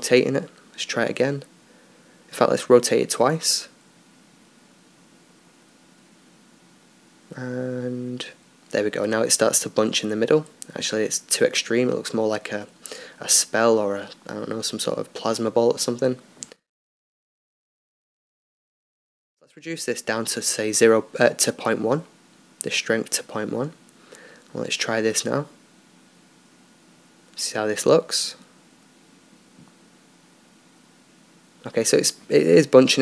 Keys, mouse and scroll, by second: 0.1-1.7 drag, 0.9-2.4 right drag, 1.7 r, 3.0 r, 5.3-7.8 drag, 7.2 alt+a, 12.1-14.9 drag, 18.4-21.3 drag, 25.9-28.6 drag, 28.4-29.8 right drag, 29.6 alt+a.